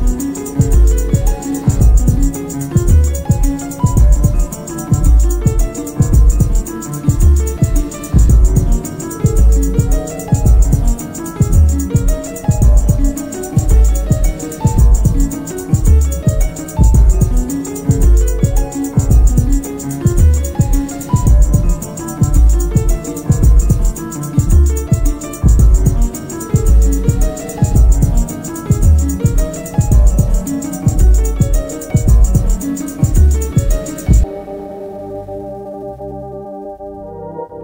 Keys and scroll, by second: 1.3 ,, 3.9 1, 9.9 F1, 10.2 F2, 13.2-16.6 typing, 13.4 Return, 15.4 Return, 16.7 Return, 17.7 ctrl+d, 17.8 Escape, 24.6 ctrl+z, 25.5 shift+r, 25.6 shift+o, 25.8 shift+t, 25.9 Return, 26.4 ctrl+d, 26.5 Escape, 27.7 9, 27.9 Return, 30.6 F1, 32.7 shift+h, 32.8 shift+i, 32.8 shift+p, 32.9 Return, 34.6 p, 36.0 F1, 36.7 ctrl+d, 36.8 Escape.